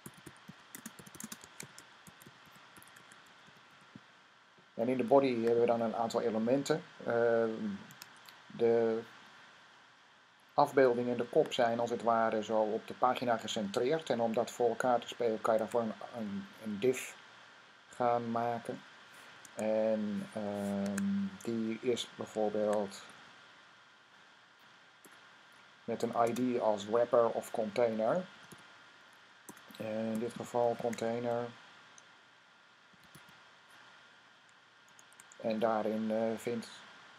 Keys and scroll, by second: 0.0-4.0 typing, 7.7 Tab, 15.4 Tab, 19.2 Tab, 20.6 Tab, 22.2-23.5 typing, 24.4 Down, 25.7-26.5 typing, 27.9-33.5 typing, 34.7 typing.